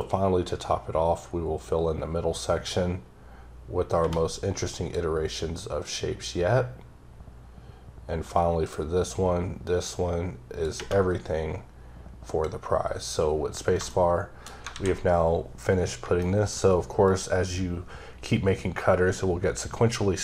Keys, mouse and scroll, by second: 6.3 click, 13.7 shift+Num_Lock, 13.9 shift+middle click, 14.7 a, 16.2 shift+middle click, 16.6 scroll up 1, 17.0 click.